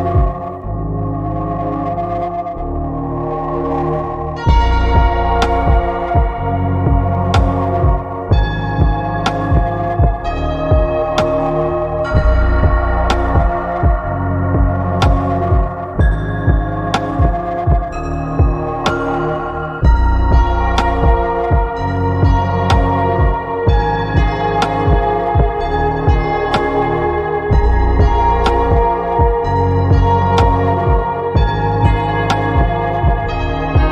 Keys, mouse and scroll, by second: 0.4 middle click, 1.3 middle drag, 4.6-5.0 middle drag, 6.3 click, 8.5-11.6 drag, 11.2 KP_0, 14.5-15.7 drag, 19.2-21.7 drag, 27.2 click, 29.2 click, 30.5 click, 31.2 click, 32.9-33.9 drag.